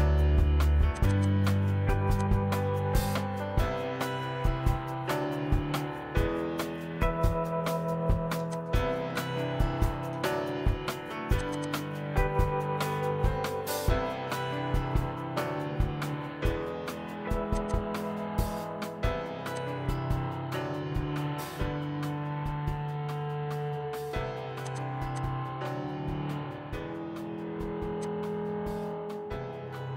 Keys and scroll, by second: 0.4 m, 4.4-6.4 typing, 8.1-11.9 typing, 13.2 ctrl+g, 19.2 p, 20.5-21.8 typing, 25.0 |, 25.8 ctrl+c, 26.2 Escape, 27.6 p, 28.6-29.9 typing.